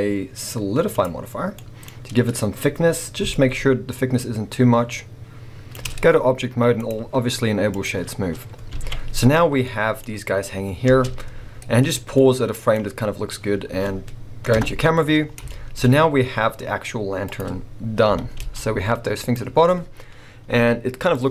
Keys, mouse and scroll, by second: 1.6-3.4 middle drag, 3.4-9.8 drag, 10.8 space, 11.5-12.1 scroll down 1, 12.1 middle click, 14.5 KP_0, 15.2 scroll down 1, 15.5 shift+middle click, 15.8-16.4 scroll up 1, 16.4-17.2 scroll down 1, 17.2 click, 18.0 g, 19.3 click, 20.7-21.3 scroll up 1.